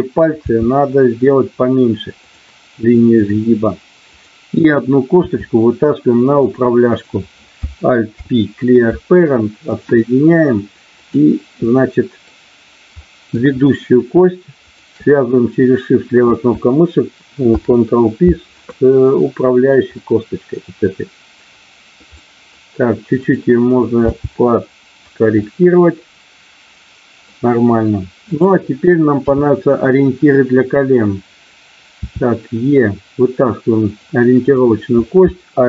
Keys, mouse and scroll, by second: 0.4 g, 2.2 click, 5.2 e, 8.2 alt+p, 11.0 click, 11.7 middle click, 13.0 middle click, 14.5 shift+click, 17.4 ctrl+p, 19.9 middle click, 22.0 middle click, 24.0 g, 24.9 click, 25.4-27.2 middle drag, 29.2 KP_3, 32.0 e, 33.8 click, 34.4 click.